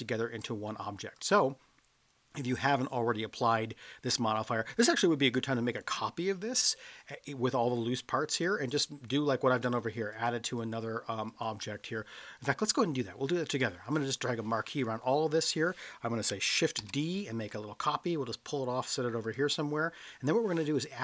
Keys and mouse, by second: 1.1 click, 9.6 click, 10.1 click, 10.6 click, 11.3 click, 12.6-14.8 drag, 16.8 shift+d, 19.3 click.